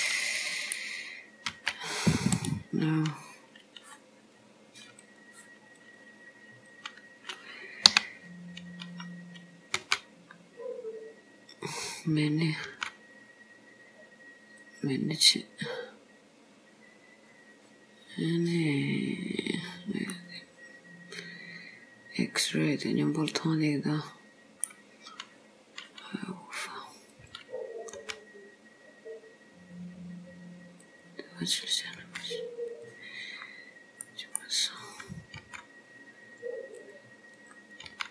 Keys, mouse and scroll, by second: 1.6 b, 5.1 click, 5.2 click, 5.9 click, 6.8 click, 8.0 o, 9.9 g, 12.8 g, 15.7 click, 20.1 scroll down 1, 20.2 middle click, 25.1 scroll up 2, 27.2 click, 28.1 g, 31.5 click, 32.1 g, 33.5-34.1 scroll down 2, 34.1 middle click, 35.0 click, 35.5 g, 37.5 click, 38.0 g.